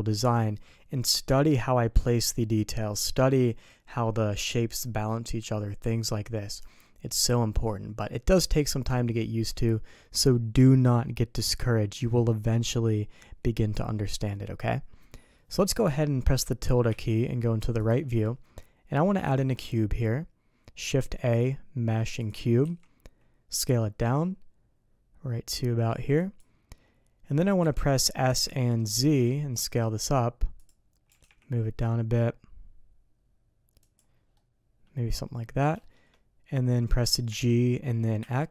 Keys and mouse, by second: 16.6 middle click, 17.9 `, 19.2 shift+a, 22.6 s, 27.6 s, 31.1 g, 34.3-35.1 middle drag, 35.8 shift+middle click, 37.3 g.